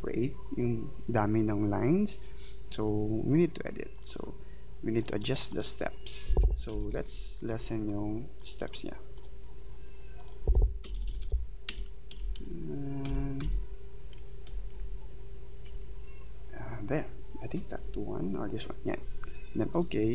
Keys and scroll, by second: 6.7 shift+Down, 10.8 shift+Down, 12.1 shift+Up, 13.0 shift+Down, 14.5 Up.